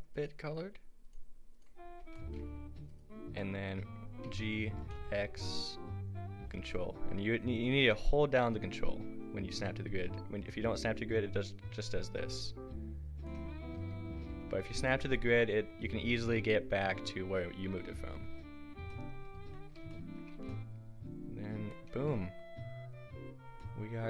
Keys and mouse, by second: 1.8 click, 2.0 Tab, 3.0-4.0 drag, 4.3 g, 13.6 a, 19.6 a, 20.4 a.